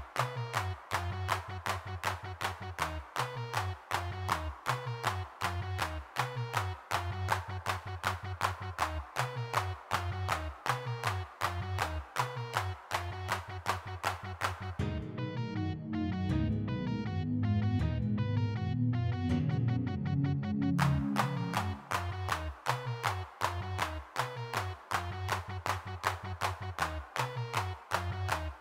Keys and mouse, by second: 3.6 click, 7.3-8.8 middle drag, 11.0 3, 12.3-13.4 middle drag, 14.4-15.7 middle drag, 15.7 f, 16.9 middle click, 17.1 ctrl+z, 17.1 ctrl+z, 17.2 ctrl+z, 17.6-18.7 middle drag, 19.4 middle click, 21.9 g, 21.9 f, 22.0-23.1 drag, 24.2 middle click, 24.9-27.3 drag, 27.8 middle click, 28.3 click.